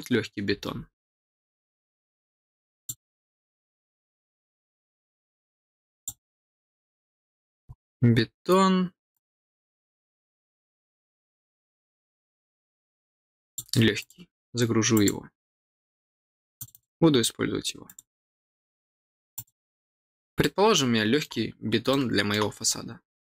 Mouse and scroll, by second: 0.9-1.2 scroll down 4, 2.7 click, 5.9 click, 7.3-7.6 scroll up 4, 8.1 scroll down 2, 9.1-13.5 drag, 13.9 click, 14.9 click, 16.5 click, 17.8 click, 19.3 click, 20.3 middle click, 21.8 middle click, 22.5-23.3 scroll up 1.